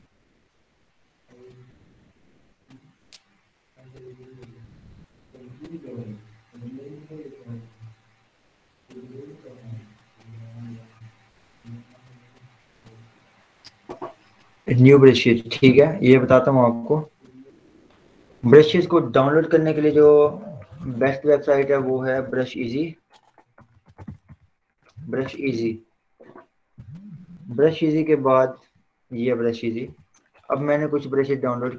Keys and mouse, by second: 20.1 ctrl+t, 21.7 click, 23.5-25.3 typing, 25.6 Return, 30.3 ctrl+w.